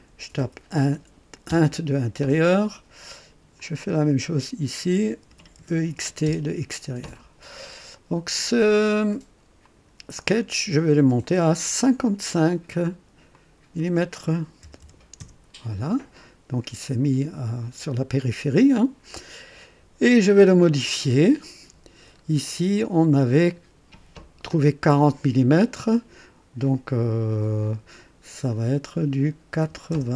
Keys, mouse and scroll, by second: 0.0-1.5 typing, 3.5 click, 4.8-6.4 typing, 9.6 click, 11.2 click, 11.6 click, 13.3 click, 14.6 KP_5, 15.1 Return, 20.7 click, 22.1 scroll up 2, 22.8-23.6 right drag, 28.3 click, 29.6 KP_8, 29.9 KP_0.